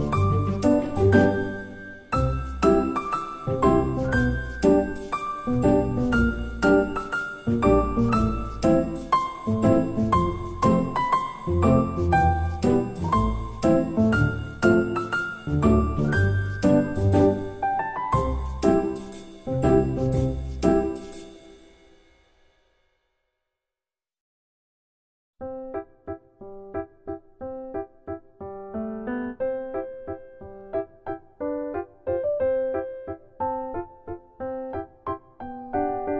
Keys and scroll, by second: 5.0 ctrl+c, 5.1 ctrl+v, 6.6 8, 6.7 F2, 16.2 Tab, 18.8 Delete, 19.2 Delete, 19.8 Delete, 24.8 ctrl+z, 26.6 Tab, 32.9-34.9 typing, 35.0 Return.